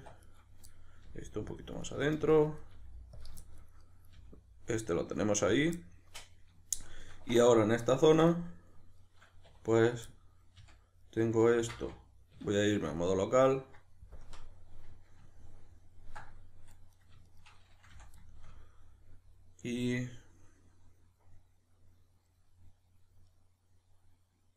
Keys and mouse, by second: 0.2 right click, 0.7 middle click, 1.0 g, 1.6 click, 1.8 right click, 2.0 g, 2.3 click, 2.6 right click, 2.8 g, 3.2 click, 3.4 shift+middle click, 3.8 right click, 4.2 g, 5.6 click, 5.8-8.1 middle drag, 8.1 right click, 8.4-9.5 middle drag, 9.5 2, 9.7 right click, 10.1 middle click, 10.5 f, 11.0 middle click, 11.5 ctrl+z, 13.7 middle click, 14.3 KP_Decimal, 14.5 middle click, 16.3-17.0 middle drag, 17.0 right click, 17.3 shift+right click, 17.9 f, 18.2-24.5 shift+middle drag.